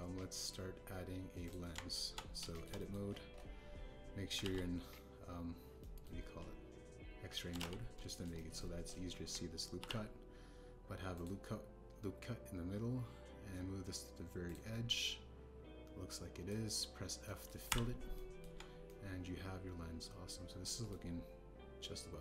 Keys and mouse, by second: 0.7 click, 2.4 click, 2.7 Tab, 3.5 shift+click, 3.7 click, 5.4 alt+z, 6.7 click, 6.8 middle click, 8.5 alt+z, 9.1 shift+middle click, 9.3 middle click, 9.4 click, 10.7 ctrl+r, 15.4 click, 15.9-17.4 middle drag, 18.2 middle click, 18.6 f, 19.1 click, 19.4 Tab, 19.8-20.7 middle drag, 20.8-21.6 middle drag, 21.8-22.2 middle drag.